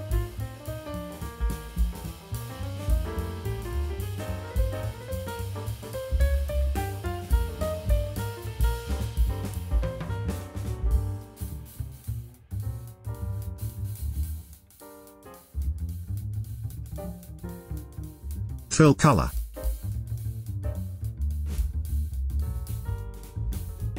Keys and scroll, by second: 11.1 v.